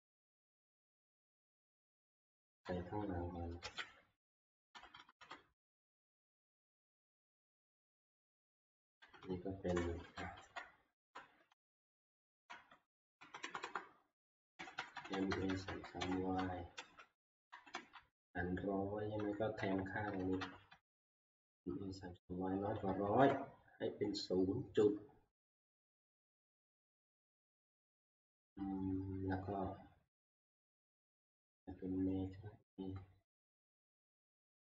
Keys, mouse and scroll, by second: 2.4 Down, 2.6 Right, 3.6 ctrl+v, 5.2 Up, 8.6 Left, 8.8 Left, 9.0 Left, 9.2 Left, 10.0 Home, 10.5 Right, 11.0 Left, 11.5-12.2 Right, 12.5 Right, 12.7 Right, 13.2 Left, 13.4 Left, 13.6 Left, 14.3 Right, 14.6 Right, 14.8 Right, 14.9 Right, 15.1 Right, 15.3 Right, 15.5 Right, 15.7 Right, 16.1 Right, 16.7 ctrl+c, 17.2 Right, 17.5 Right, 17.9-18.7 Right, 19.2 Right, 19.6 Right, 20.2 Right, 20.4 Right, 20.9 ctrl+v, 22.1 Right, 22.6 Right, 22.7 Right, 23.0 Down, 25.4 Right.